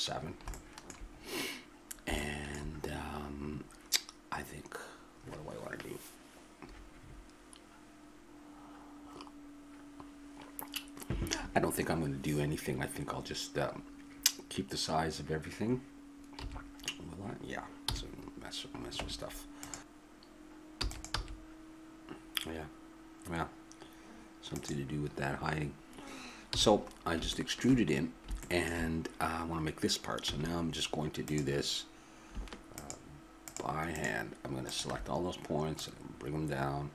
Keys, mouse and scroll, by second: 16.4 n, 17.8 n, 18.9 Tab, 20.7 e, 21.1 s, 25.1-26.6 middle drag, 26.6 n, 30.3 a, 31.2-36.9 drag.